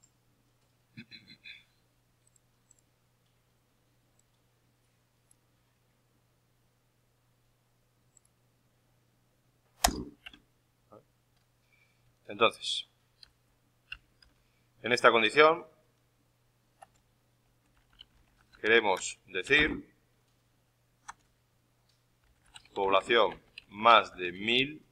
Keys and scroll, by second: 13.8 shift+Up, 14.1 shift+End, 17.1-20.0 typing.